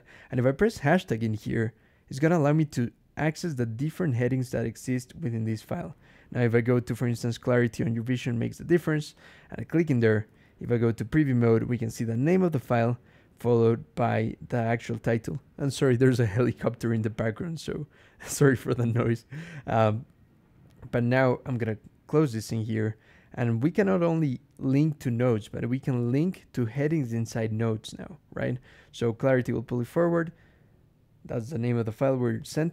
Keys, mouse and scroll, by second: 2.0 shift+3, 5.2 scroll up 2, 9.0 click, 9.8 click, 10.3 ctrl+e, 21.4 click, 29.1 middle click, 32.2 click.